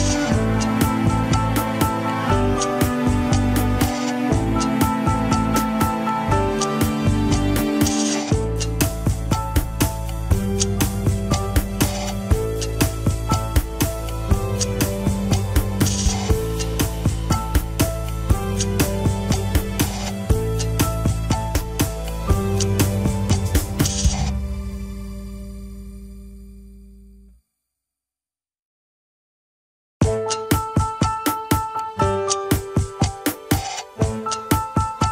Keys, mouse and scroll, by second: 0.6 scroll up 3, 1.2 shift+click, 1.8 g, 2.2 scroll up 2, 2.7 shift+click, 3.2 scroll down 3, 3.4 g, 3.9 g, 5.9 scroll down 4, 6.2 click, 6.5 scroll up 2, 6.7 h, 7.1 alt+z, 7.4 click, 7.7 g, 8.8 click, 8.9 g, 9.7-10.1 scroll up 2, 10.1 click, 10.4 alt+z, 10.8 g, 11.9 click, 12.1 g, 13.6 shift+middle click, 13.8 scroll up 2, 14.6 click, 15.5-15.9 scroll down 2, 15.9 middle click, 16.5 KP_3, 16.6 scroll up 2, 16.8 g, 18.8 scroll up 2, 19.3 click, 20.3 g, 21.0-21.6 scroll up 3, 21.6 shift+click, 22.0 scroll down 4, 22.1 g, 23.6-23.9 scroll down 1, 23.9 KP_1, 24.2 scroll up 2, 24.4 alt+z, 24.7 scroll down 1, 25.2 alt+z, 25.6 click, 26.0 alt+z, 26.3 alt+z, 26.7 shift+click, 27.9 click, 28.7 alt+z, 29.2 alt+z, 29.8 click, 30.0 alt+z, 30.2 scroll up 2, 30.3 g, 30.9 KP_3, 31.3 g, 31.7 alt+z, 31.9 g, 33.1 scroll down 3, 33.3 KP_1, 33.6 scroll up 1, 34.0 Left, 34.3 KP_3, 34.6 alt+z, 34.9 g.